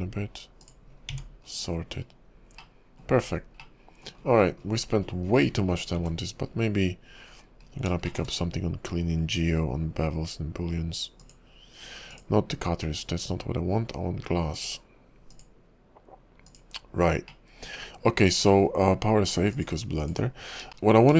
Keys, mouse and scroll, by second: 0.9-2.1 scroll down 8, 1.1 Tab, 2.6 middle click, 3.1-3.7 scroll down 3, 3.6 middle click, 4.2-6.4 scroll down 37, 6.0 `, 6.5 scroll up 4, 6.8 KP_5, 7.6 scroll up 1, 8.1 shift+middle click, 8.3-9.8 scroll down 1, 9.8-10.7 scroll down 2, 11.4 click, 12.1 click, 14.5 click, 15.3 click, 16.7 click, 17.4 middle click, 17.9 KP_5, 18.6 middle click, 20.3 click, 20.9 shift+middle click, 20.9 scroll up 4.